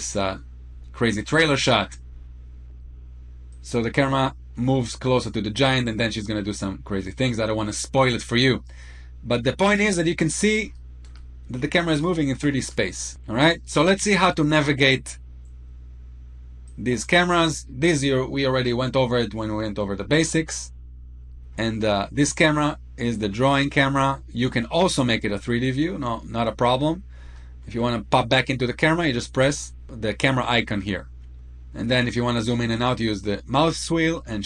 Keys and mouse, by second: 2.1-2.5 shift+middle drag, 3.4-9.7 drag, 9.9 middle click, 10.5-10.9 shift+middle drag, 11.6-12.4 shift+middle drag, 13.7-14.0 shift+middle drag, 14.7 middle click, 16.4 click, 17.8-19.6 middle drag, 20.2-21.0 shift+middle drag, 22.4 click, 24.4-24.9 middle drag, 25.4-26.4 middle drag, 27.2-27.6 shift+middle drag, 29.2 click.